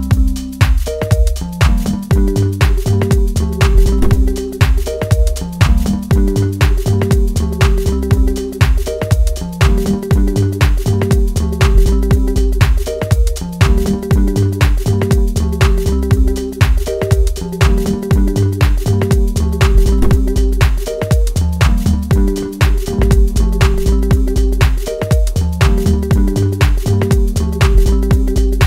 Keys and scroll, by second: 3.7 ctrl+space, 12.5 ctrl+k, 23.8 Up.